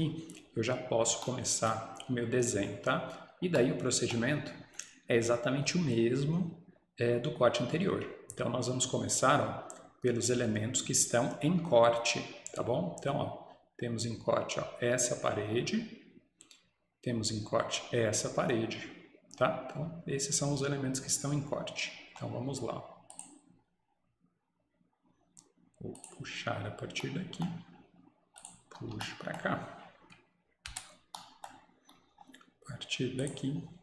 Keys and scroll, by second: 28.7 Escape, 30.7 Return.